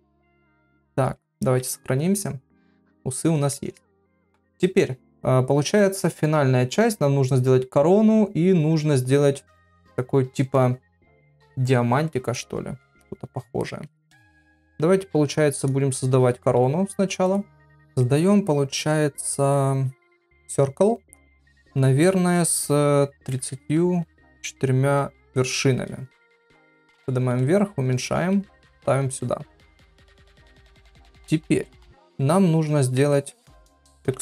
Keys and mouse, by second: 0.0 ctrl+Tab, 1.5 ctrl+s, 3.6 middle click, 12.3 middle click, 13.0 shift+middle click, 13.6 shift+middle click, 17.7 shift+a, 21.4-25.9 drag, 26.3 g, 27.3 s, 28.2 g, 29.1 click, 30.5 click, 31.9 shift+middle click, 32.8 Tab, 34.0 2.